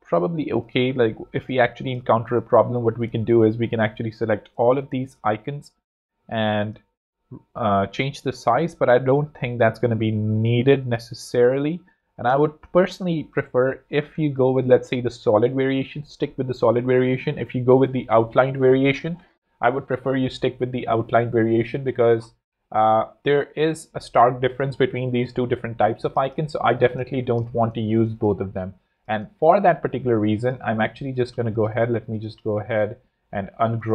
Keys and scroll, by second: 1.1 z, 1.9 space, 9.1 z, 10.7 z, 12.2 space, 13.9 space, 14.6 z, 26.7 alt+z, 27.8 space, 30.5 shift+super+g, 31.2 shift+super+z, 32.1 super+z, 33.0 shift+super+g.